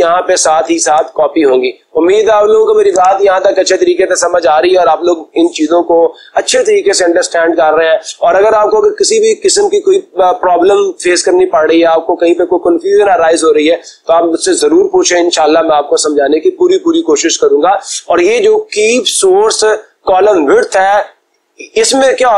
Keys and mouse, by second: 11.0 Escape.